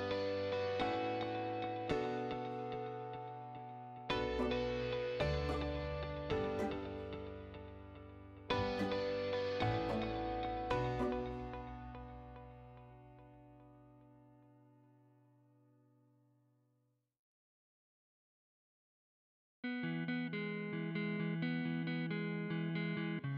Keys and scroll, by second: 1.7 o, 2.0 space, 4.9 5, 5.3 ', 5.6 Return, 7.6 space, 8.4 space, 8.8 6, 9.1 Return, 12.2 Escape.